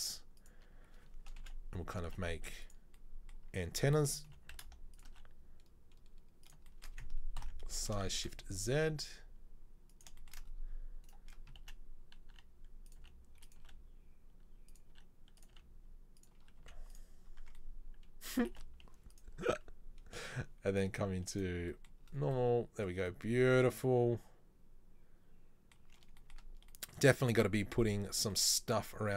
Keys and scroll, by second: 1.5 KP_7, 2.1 g, 4.3 g, 5.1 e, 7.5 ctrl+l, 7.9 s, 12.5 e, 13.1 s, 13.6 e, 15.0 e, 15.6 s, 16.7 z, 17.5 Tab, 18.7 space.